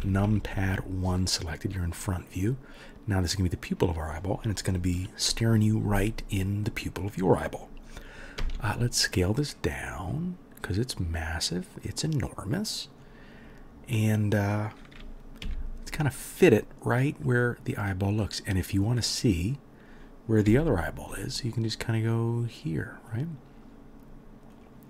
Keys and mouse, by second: 0.0-0.6 typing, 3.0-15.4 middle drag, 8.4 s, 15.4-16.5 drag, 15.4 g, 16.5-18.3 middle drag, 18.3 click, 18.4-21.7 middle drag, 20.5 g, 21.7-24.6 drag, 24.6-24.8 middle drag.